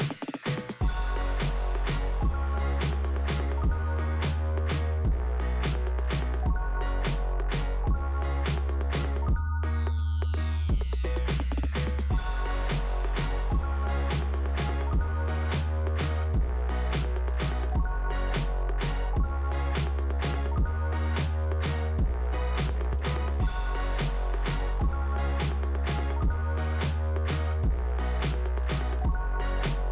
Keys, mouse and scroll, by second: 0.3 right click, 1.0 click, 1.8 click, 2.6 scroll down 1, 4.1 middle click, 4.8-5.5 scroll up 1, 6.3 click, 9.0 click, 10.4 middle click, 10.8-11.8 scroll down 1, 11.8 click, 14.5 click, 16.1 click, 18.4 click, 19.3-19.8 scroll down 1, 20.4 middle click, 21.3-22.0 scroll up 1, 22.9 click, 28.3 click.